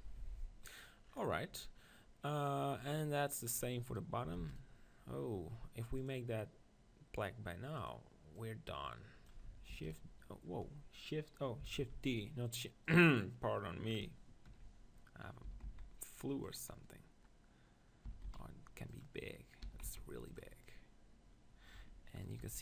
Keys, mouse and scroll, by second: 0.2 z, 3.5-6.1 right drag, 4.4 shift+s, 6.1-9.6 drag, 9.8 shift+s, 11.8 shift+d, 12.9-14.8 drag, 15.5 s, 16.5-18.9 drag, 18.1 s, 19.6 s, 20.4-22.4 drag, 21.8 Tab, 22.2 right click, 22.4 b.